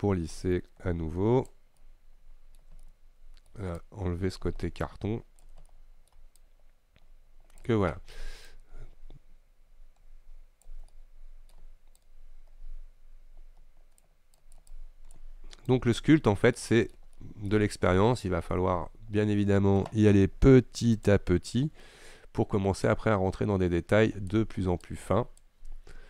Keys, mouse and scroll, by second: 1.9-3.6 shift+middle drag, 3.6 scroll up 1, 3.9-5.8 shift+drag, 5.8 middle click, 6.4-11.0 shift+drag, 11.0-12.0 middle drag, 12.0-16.6 shift+drag, 16.6-18.6 middle drag, 18.6-21.1 scroll up 2, 21.1 click, 21.6-22.9 scroll up 2, 22.9-26.0 drag.